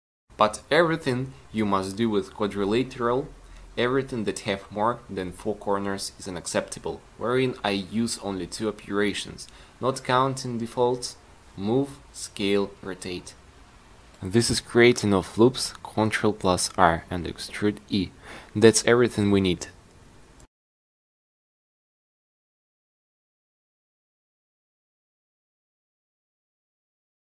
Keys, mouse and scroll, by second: 0.1 c, 10.8 ctrl+r, 15.1 a, 15.2 c, 15.7-17.2 drag, 17.4-18.4 drag.